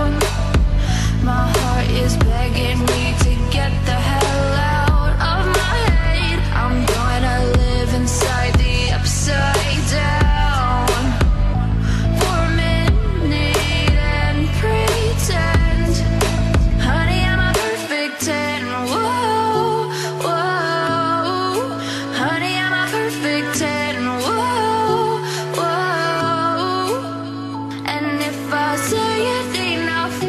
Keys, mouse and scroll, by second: 1.2 click, 2.0 click, 3.2-4.2 drag, 4.5 click, 5.7 click, 6.4 r, 9.8 ctrl+z, 10.4 r, 11.3 ctrl+z, 11.5 click, 12.0 r, 12.9 ctrl+z, 13.4 r, 15.0 click, 15.6-16.6 drag, 17.1 click, 19.7 click, 20.6 click, 21.6-22.7 drag, 22.8 click, 26.8 right click, 28.0 right click, 29.1 click.